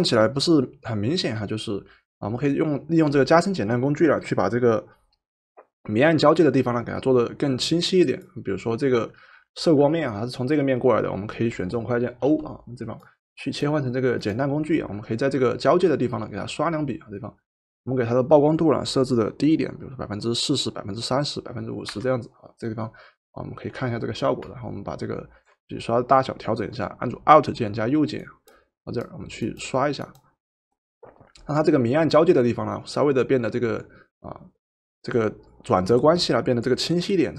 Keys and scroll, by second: 12.2 o, 21.9 4.